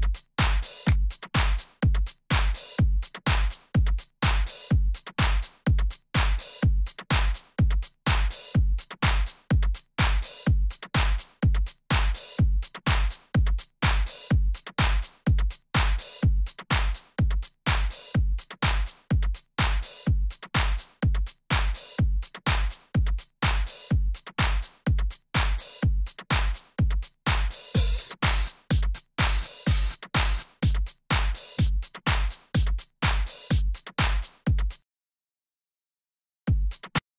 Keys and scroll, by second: 1.8 super+Right, 6.5 z, 8.8 z, 10.3 super+Left, 11.8 d, 14.2 super+Up, 18.6 Left, 20.6 Up, 20.9 Right, 35.1 super+Return, 35.2 super+Right, 35.6 super+Down, 36.1 super+Return, 36.4 space.